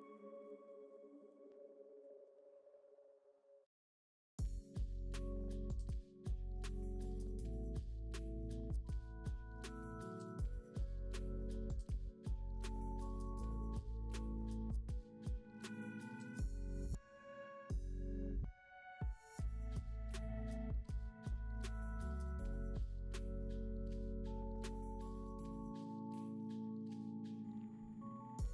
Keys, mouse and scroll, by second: 0.2-1.0 drag, 1.0 scroll up 4, 1.1 middle click, 1.6-2.2 drag, 2.2-3.0 middle drag, 3.0-3.5 drag, 3.8-5.8 drag, 5.8-6.4 scroll down 7, 6.6-7.0 drag, 7.0 g, 7.5 middle click, 8.0-8.9 scroll up 7, 8.9-10.1 middle drag, 12.3 middle click, 12.8-13.2 scroll up 4, 14.0-19.9 drag, 19.9-21.6 middle drag, 21.6-22.8 drag, 24.3-24.9 drag, 24.9 scroll down 3, 26.1-27.7 middle drag.